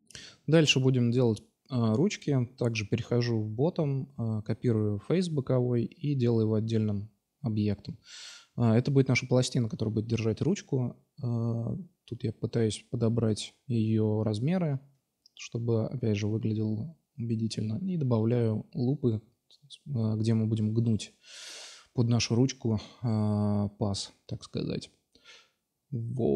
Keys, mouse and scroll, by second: 0.0 alt+F5, 1.0 click, 1.3 Tab, 1.7 middle drag, 2.2 shift+d, 2.7-3.5 middle drag, 2.9 p, 3.5 Tab, 3.9-4.7 drag, 4.4 s, 4.7 middle click, 4.9 middle click, 5.4 Tab, 6.3 3, 6.7 s, 7.2-7.6 drag, 8.3-9.2 drag, 9.5 s, 10.1-11.0 drag, 11.0 s, 11.6-12.4 drag, 12.4 s, 12.7-14.5 drag, 14.5 s, 16.8 ctrl+r, 18.7 s, 20.0-22.1 drag, 20.4 ctrl+r, 21.4 ctrl+r, 22.6 s, 23.5-23.8 drag, 24.5 middle click, 24.7 Tab, 25.7 shift+a.